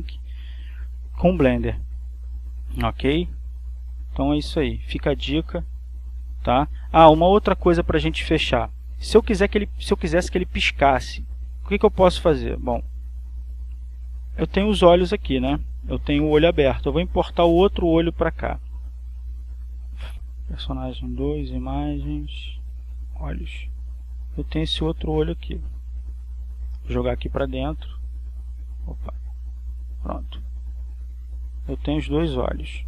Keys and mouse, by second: 0.0 click, 2.6 click, 3.6-9.2 drag, 12.8 click, 13.6 click, 14.5 click, 15.2 click, 19.9 click, 20.5 click, 21.5 click, 23.2 click, 24.1 click, 25.2 click, 26.5 click, 28.0 click, 29.0-30.0 drag, 30.3 click, 32.0 click, 32.7 click.